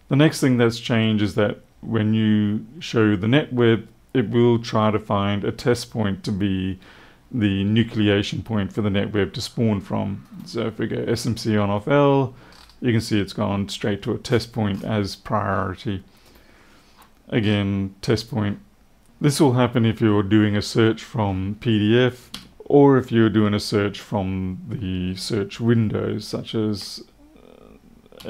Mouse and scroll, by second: 10.2 right click, 12.4-12.7 scroll up 1, 14.2-14.8 scroll down 2, 16.1 right click, 17.3 scroll up 1.